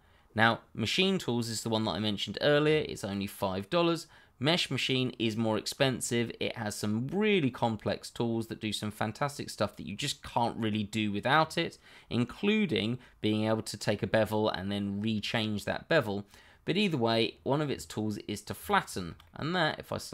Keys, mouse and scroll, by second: 2.7 middle click, 16.0 middle click, 18.5 shift+click, 18.9 middle click.